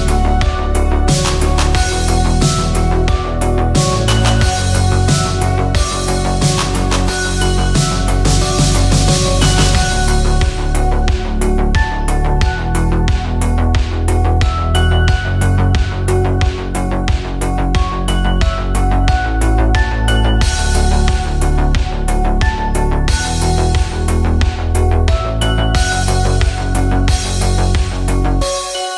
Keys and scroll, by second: 2.6 shift+Up, 11.0 shift+Up, 11.7 shift+Down, 12.3 Up.